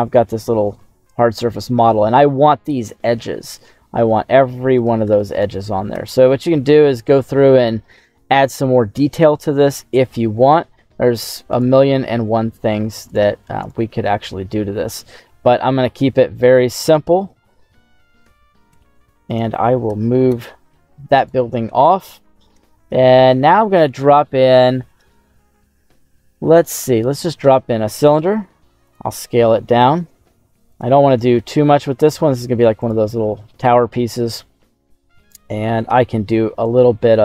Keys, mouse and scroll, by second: 0.6-1.1 scroll up 2, 1.2 middle click, 3.9 q, 4.5 Tab, 5.9 Tab, 7.3 middle click, 8.5 middle click, 10.4-11.4 middle drag, 11.4 right click, 12.0 middle click, 12.0 scroll down 1, 12.7 Tab, 13.0 right click, 13.4 Tab, 13.5 right click, 14.6 scroll down 2, 14.8 middle click, 15.5 Tab, 15.5 scroll down 1, 18.2 d, 18.6 x, 19.2 right click, 19.8 g, 20.2 x, 21.1 click, 22.7 shift+a, 28.1 s, 28.8 click, 29.3 s, 30.6 click, 31.1 s, 31.3 z, 32.7 click, 33.7 scroll down 1, 34.0 middle click, 34.3 scroll down 1, 34.5 scroll up 2, 35.1 right click, 35.8 Tab, 36.5 right click.